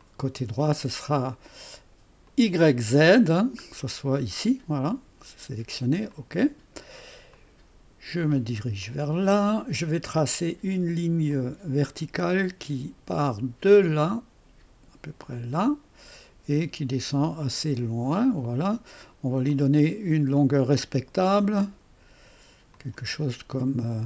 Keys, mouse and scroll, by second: 0.0 click, 2.3 click, 2.7 click, 3.9-6.1 right drag, 6.1 click, 6.9-8.0 scroll up 2, 8.0-9.5 scroll up 1, 9.5-11.3 scroll up 1, 11.3 click, 15.3 click, 16.1 click, 18.1 click, 19.1-19.5 scroll down 1, 19.5 right click, 22.7 click.